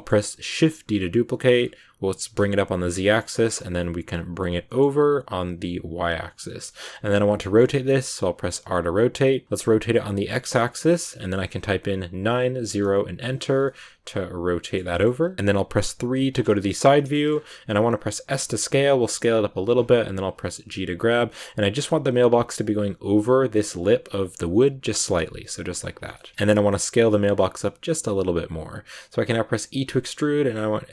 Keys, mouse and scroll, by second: 0.5 shift+d, 3.2 shift+middle click, 3.4-4.0 scroll up 2, 4.0 g, 6.6-7.9 shift+middle drag, 7.9 r, 13.5-16.1 middle drag, 16.1 KP_3, 16.8 click, 17.0 shift+middle click, 17.2 shift+scroll up 3, 18.1 s, 26.0 shift+middle click, 26.1 scroll down 1, 26.3 s.